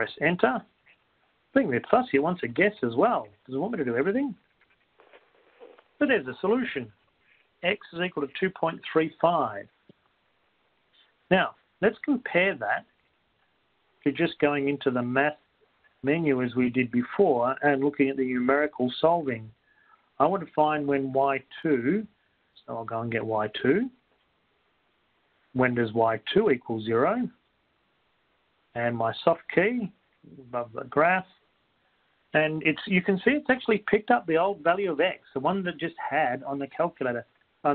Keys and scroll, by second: 4.6 Left, 4.6 Down, 4.6 Return, 4.6 Right, 4.6-5.6 typing, 16.2 Up, 18.2 Return, 25.1 2, 26.1 Down, 27.6 0, 28.0 F4, 28.0 F2, 31.6 F5.